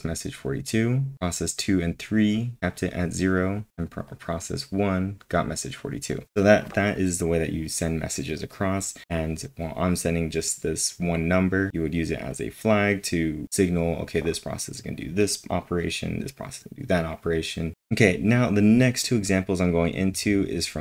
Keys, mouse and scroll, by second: 1.1-4.0 drag, 4.0-6.1 drag, 6.1-8.3 drag, 17.7 scroll down 8, 20.1 scroll down 1, 20.3 scroll.